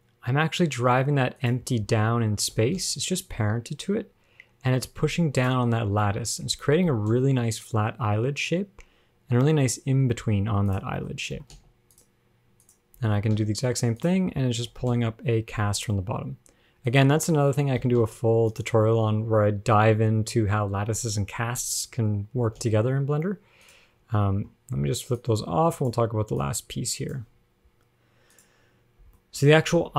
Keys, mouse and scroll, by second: 1.9-2.7 scroll down 8, 2.7 g, 6.3-7.1 scroll up 7, 7.1 g, 11.2 shift+middle click, 11.6 g, 12.9 click, 13.6 g, 14.4-14.7 scroll down 9, 14.9 g, 17.4-17.9 scroll up 6, 18.0 g, 22.1-22.6 scroll up 1, 22.6-25.2 scroll up 1, 22.6 g, 25.4 click, 26.6 click, 27.6-28.0 scroll up 7, 28.6 click, 29.2 scroll down 1, 29.4 shift+middle click, 29.7 scroll up 1.